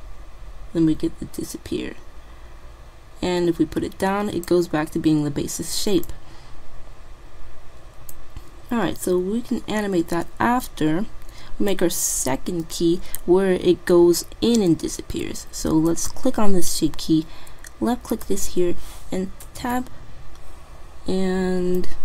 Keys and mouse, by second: 6.1-7.9 drag, 7.9 typing, 8.9 typing, 9.0 middle click, 10.7-12.4 drag, 12.4-14.3 middle drag, 15.9-17.6 drag, 17.8 middle click, 18.2-19.8 drag, 19.7 Tab, 20.0-21.8 middle drag.